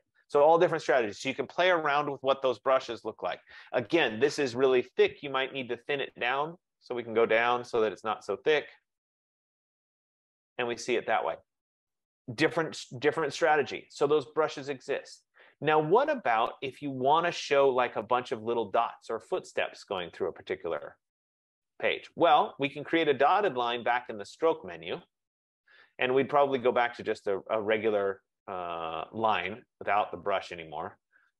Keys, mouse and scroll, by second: 6.4 click, 6.7 click, 7.3 click, 7.9 click, 9.0 F15, 9.4 click, 24.4 click, 26.9 click, 30.9 click.